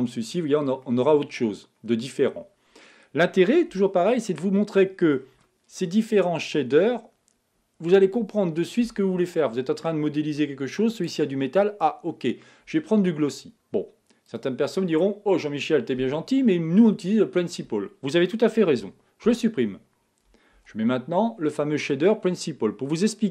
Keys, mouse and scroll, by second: 0.0 click, 0.8-3.8 middle drag, 3.8 a, 4.3-14.4 middle drag, 14.4 click, 18.8 x.